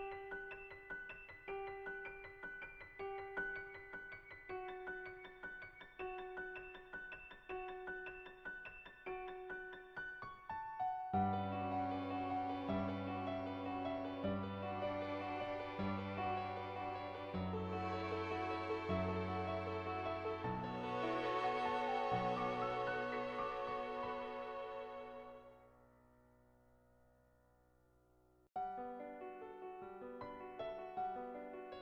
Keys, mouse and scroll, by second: 2.0-3.6 typing, 2.9 click, 3.3 click, 3.8 click, 4.3 ctrl+z, 4.7 click, 4.7 ], 8.4 click, 9.3 ctrl+z, 13.5 [, 14.2-17.1 drag, 17.3 ], 17.6 ], 17.6 ], 17.7 click, 18.1 click, 19.1-21.7 drag, 21.8 click, 22.7 [, 22.8 click, 22.8 [, 23.4 ], 23.6 click, 24.5 ctrl+z, 24.7 click, 25.2 [, 25.4 click, 25.7 [, 25.9 click, 26.4 ], 26.5 ], 26.7 click, 27.6 click, 28.3 [, 28.6 click, 28.9 [, 29.0 click, 29.5 click, 29.5 [, 30.6 ], 30.8 click, 31.3 ], 31.7-31.8 drag, 31.7 ].